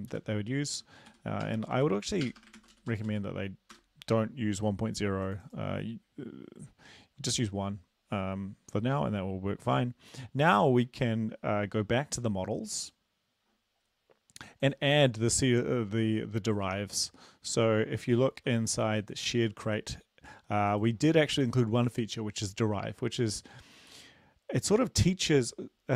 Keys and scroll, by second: 0.1 Return, 0.8 Up, 1.1 End, 1.4 BackSpace, 1.6 BackSpace, 1.8 Up, 2.3 BackSpace, 2.4 BackSpace, 2.6 ctrl+s, 2.8 Down, 2.9 Down, 3.1 Down, 3.7 Return, 18.1 ctrl+c, 18.3 ctrl+c.